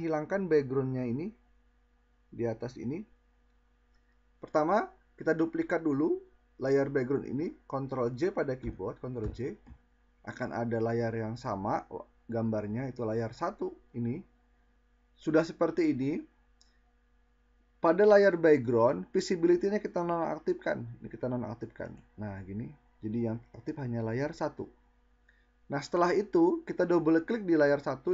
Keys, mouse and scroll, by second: 7.5 ctrl+j.